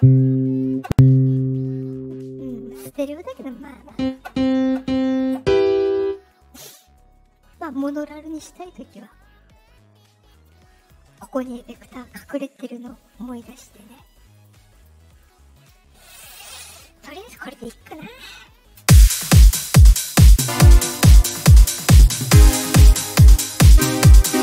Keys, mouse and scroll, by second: 3.3 click, 7.4 click, 8.2 click, 10.2 click, 10.7 click, 11.6 click, 13.9 click, 14.3 click, 14.7 click, 15.0 click, 15.5 click, 18.7 space.